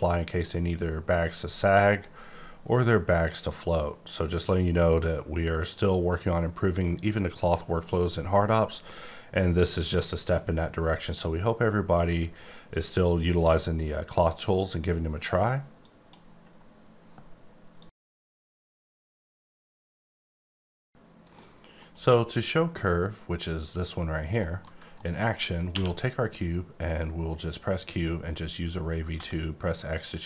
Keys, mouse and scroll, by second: 0.4-1.4 scroll down 14, 1.8 scroll down 4, 2.4-3.3 scroll down 9, 15.8 click, 21.9-23.7 scroll up 2, 24.4 middle click, 24.9 middle click, 25.7 q, 27.9 click, 29.1 x.